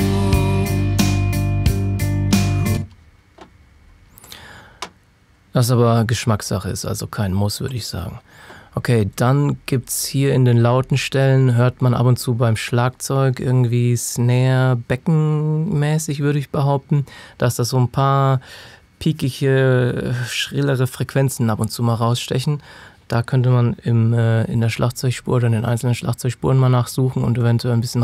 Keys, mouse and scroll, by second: 2.6 space, 4.2 click, 7.6 click, 26.3 click.